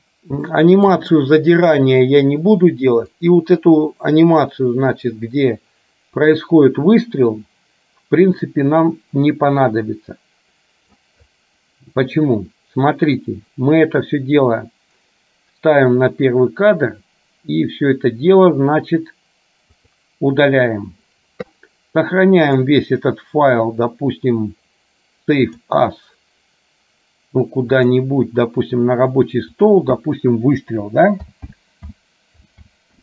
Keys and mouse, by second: 0.7 shift+middle click, 3.3-11.2 drag, 19.9 click, 22.4-25.9 drag.